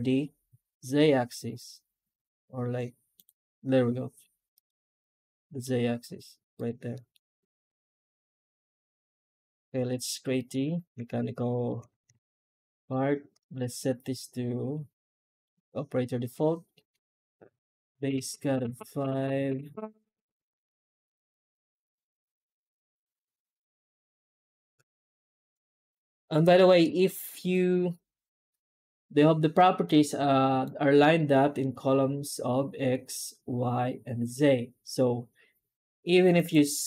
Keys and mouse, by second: 4.9 right click, 5.1-5.5 middle drag, 6.8 middle drag, 7.6 shift+middle click, 9.0 middle drag, 9.8 right click, 10.3 alt+middle click, 10.7 Tab, 11.4 middle drag, 11.5 middle click, 11.7 Tab, 12.1 shift+q.